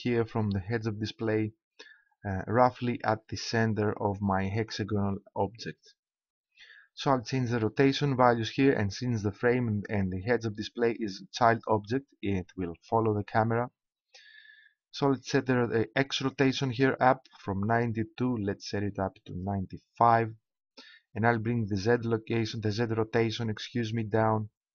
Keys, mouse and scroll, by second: 16.3 click, 20.8 click, 21.0 middle click, 23.4-24.7 drag.